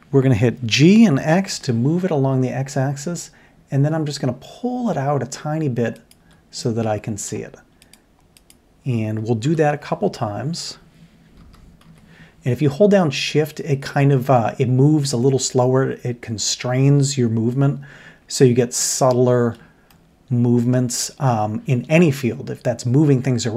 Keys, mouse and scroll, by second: 0.7 g, 6.6-7.3 middle drag, 9.4 ctrl+KP_7, 11.4 g, 19.9-21.1 middle drag.